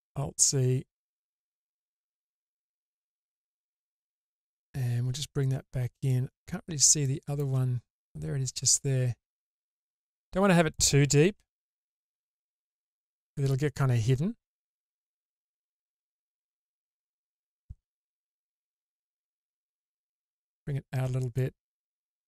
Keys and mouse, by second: 1.9 click, 5.5 click, 9.4-10.7 drag, 11.5 alt+z, 12.3-13.0 drag, 13.0-15.6 middle drag, 14.0-15.6 drag, 18.2 alt+z, 19.6-21.4 drag, 22.0 click.